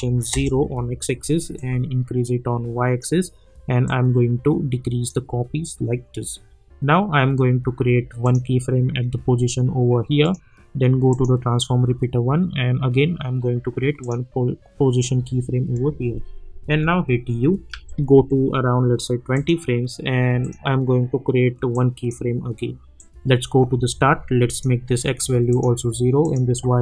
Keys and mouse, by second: 0.3 Return, 1.5-7.2 drag, 8.2 click, 14.0 click, 16.6-18.6 typing, 19.3-24.5 drag.